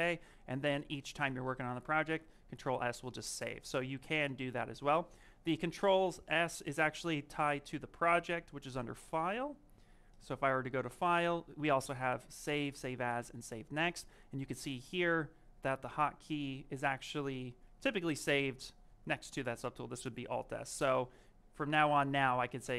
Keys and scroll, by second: 4.5 s.